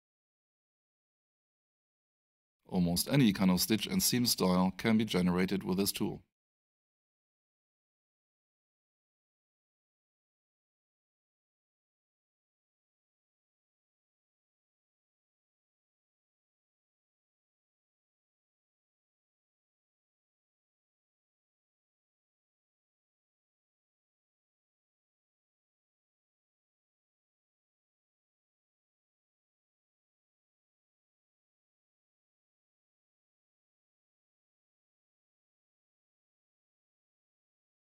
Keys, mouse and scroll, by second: 1.5 click, 3.9 click, 7.3 space, 8.2 click, 11.0 space, 14.0 alt+shift+click, 14.4 alt+shift+right click, 15.8 alt+shift+click, 17.5 alt+shift+right click, 19.9 alt+shift+middle click, 21.0 alt+shift+click, 21.8 alt+shift+middle click, 25.1 click, 27.5 alt+shift+right click, 30.1 click, 36.2 space, 37.1 click.